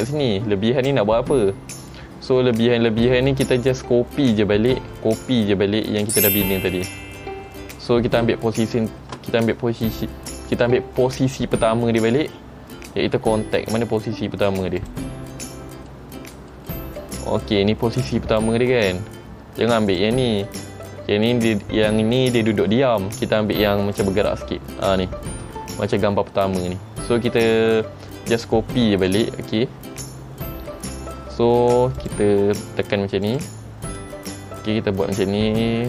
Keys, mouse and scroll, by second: 2.5-2.8 scroll down 1, 3.6-3.9 scroll down 2, 3.6 space, 3.9-4.5 scroll up 2, 4.6 scroll up 2, 5.1 shift+middle click, 15.0 click, 15.6 middle click, 16.3 middle click, 16.8 shift+middle click, 17.2 shift+middle click, 17.4-17.9 scroll up 7, 18.1 middle click, 20.1 click, 20.6 middle click, 24.1 click, 29.2 click, 29.8-30.4 scroll down 6, 32.1 click, 32.1 scroll down 3, 33.4 click, 34.1 click.